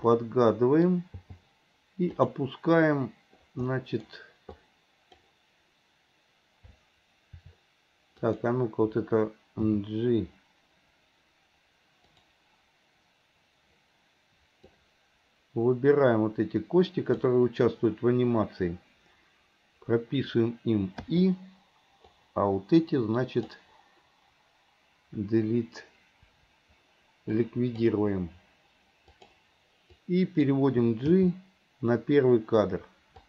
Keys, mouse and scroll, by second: 0.2-2.2 middle drag, 3.8-4.6 middle drag, 4.6-5.3 drag, 8.2 click, 14.8-17.4 drag, 22.2-23.6 drag, 27.5-27.9 drag, 29.3 drag, 30.0-30.5 drag.